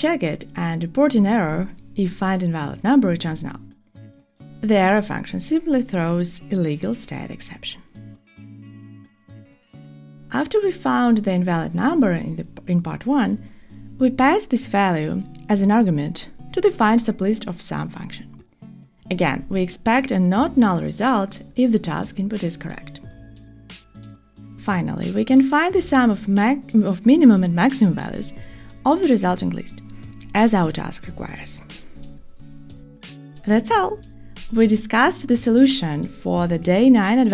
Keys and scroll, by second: 20.6 Tab, 22.5 Tab, 23.7 Return.